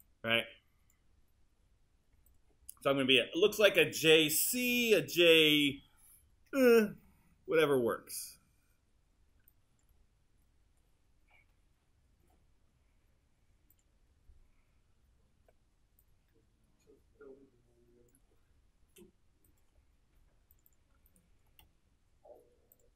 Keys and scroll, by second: 15.4 w.